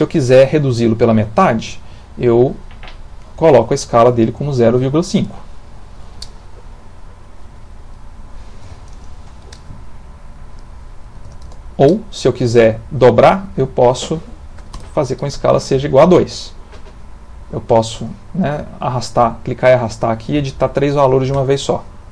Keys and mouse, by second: 2.7 click, 6.9 click, 10.2 click, 13.1 click, 17.0 click, 18.6 click.